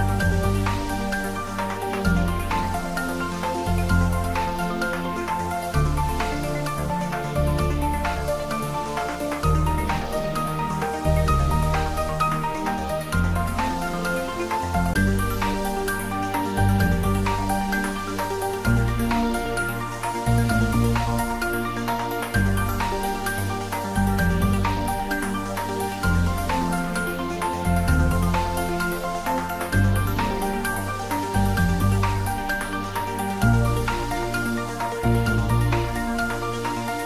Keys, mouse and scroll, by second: 1.6-2.6 typing, 6.8 space, 7.8-8.6 scroll down 1, 9.5-10.5 typing, 18.2 x, 18.5 click, 19.5 g, 20.2 x, 21.3 Left, 28.8 space, 30.8-31.3 scroll up 1, 32.3-33.4 typing, 35.3 click, 36.7-37.0 typing.